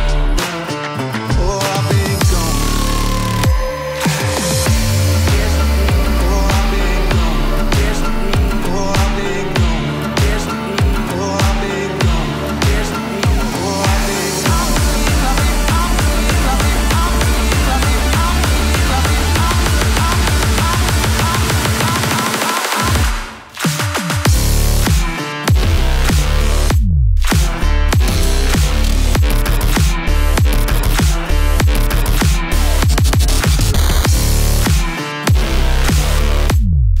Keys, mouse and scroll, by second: 0.7 scroll down 1, 1.2 middle click, 2.1-2.9 click, 3.1 space, 12.8 click, 16.2 space, 19.0 space, 19.4-21.0 drag, 22.0 right click, 22.8 click, 23.6-25.2 typing, 25.9 Return, 28.2-29.4 click, 31.9 n, 32.4 right click, 32.9 click, 34.6 ctrl+d, 36.1-37.0 shift+drag.